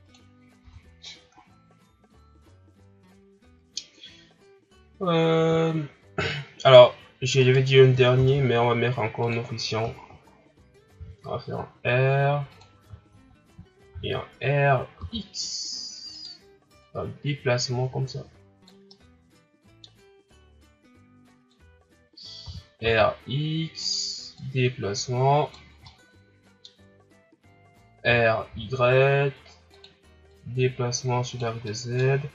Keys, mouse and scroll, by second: 0.3 scroll down 3, 0.6 a, 0.9-1.3 scroll down 4, 1.3-4.0 scroll up 6, 4.0-4.4 scroll up 1, 5.6-6.1 shift+scroll up 3, 7.4 right click, 8.1 shift+d, 10.0 shift+scroll up 4, 10.9 r, 13.1-13.9 shift+scroll down 2, 13.9 r, 16.8-18.9 drag, 18.9-20.3 middle drag, 20.3-22.4 drag, 22.4 r, 24.3-25.8 drag, 25.8-28.0 middle drag, 28.0 r, 30.3-31.6 drag, 31.6-32.1 middle drag, 32.1-32.3 scroll up 2.